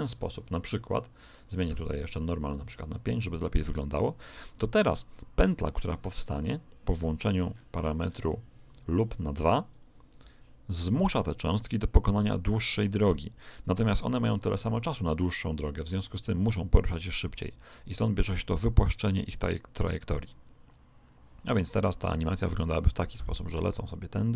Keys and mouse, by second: 2.0 click, 6.9 right click, 7.4-9.8 middle drag, 9.6 click, 22.2 click.